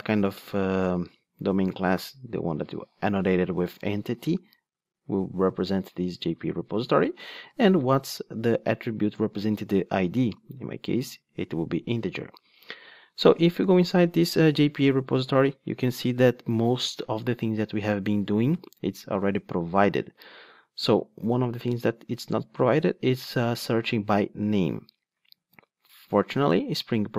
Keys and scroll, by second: 10.2 Return, 15.2 super+b, 26.2 ctrl+Tab.